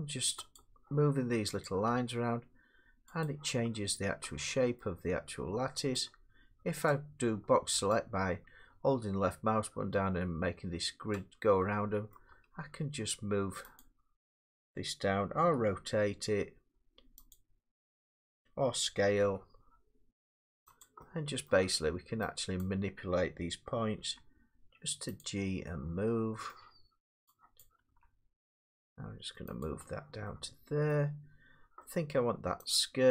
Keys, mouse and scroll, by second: 0.6 click, 1.6 click, 2.0 g, 3.3 click, 4.8 middle click, 6.9 click, 11.1 click, 12.1 middle click, 12.3 g, 13.8 click, 15.4 r, 17.3 click, 18.3 middle click, 19.2 s, 20.8 click, 21.5 middle click, 22.6 click, 24.0 g, 25.2 click, 26.5 middle click, 27.6 click, 27.9 g, 29.6 click, 30.9 middle click, 32.1 middle click.